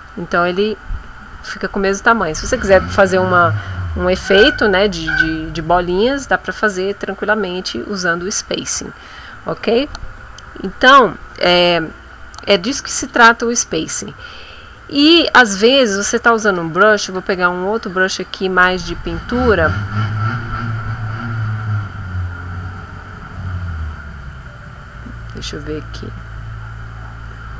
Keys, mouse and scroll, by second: 16.7 click, 17.9-19.8 drag, 20.5-21.7 drag, 22.9-27.0 drag.